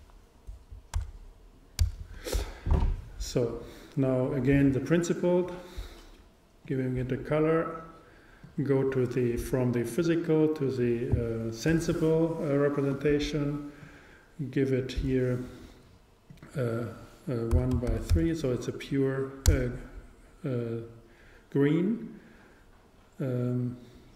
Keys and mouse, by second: 0.7 click, 4.3-6.7 drag, 8.4 click.